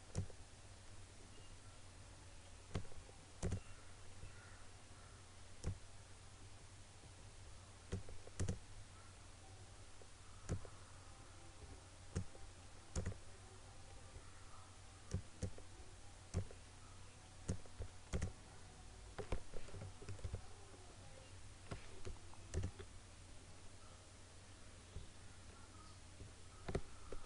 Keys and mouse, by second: 20.3 ctrl+=, 22.6 click.